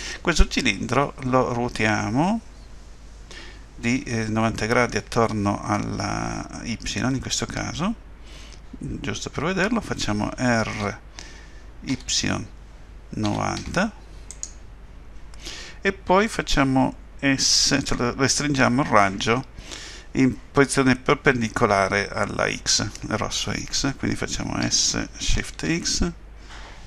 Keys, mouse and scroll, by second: 10.8 r, 24.6 s.